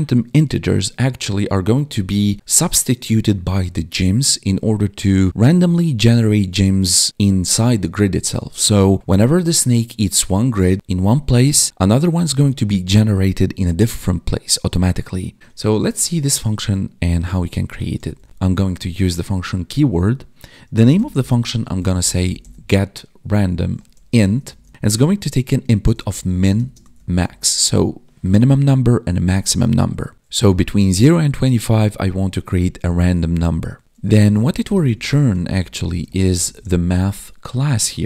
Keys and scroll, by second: 15.4 ctrl+Down, 18.3 space, 26.5 space, 33.8 ctrl+s, 35.8 space.